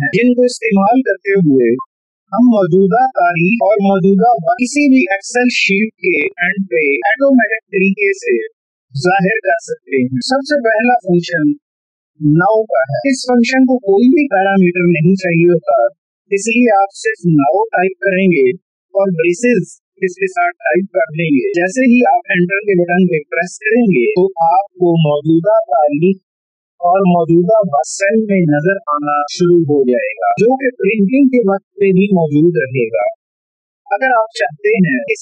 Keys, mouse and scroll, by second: 11.2 =, 13.0-15.2 typing, 26.1 Return.